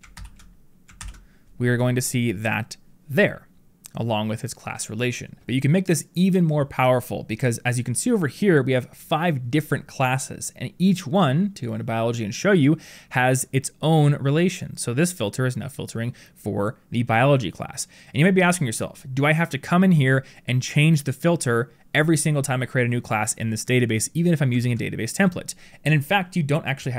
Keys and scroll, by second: 0.9 ctrl+[, 24.5 ctrl+[.